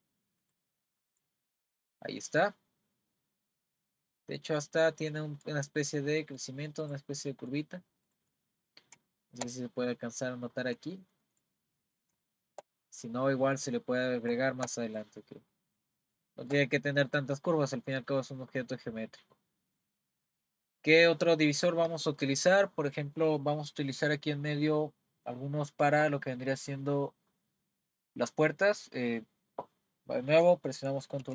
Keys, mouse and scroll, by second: 0.8 middle click, 1.3-1.6 scroll up 2, 1.6-6.4 middle drag, 6.4-6.8 scroll down 3, 6.8 click, 7.3 middle click, 8.1 click, 8.4-10.2 middle drag, 10.2-10.9 scroll up 8, 10.9 shift+middle click, 11.6-12.2 scroll up 3, 12.2 shift+middle click, 13.1 scroll up 1, 13.3-14.4 scroll down 15, 14.4 shift+middle click, 14.9 click, 15.2 middle click, 15.7 scroll up 3, 16.3-24.2 shift+middle drag, 31.2 r.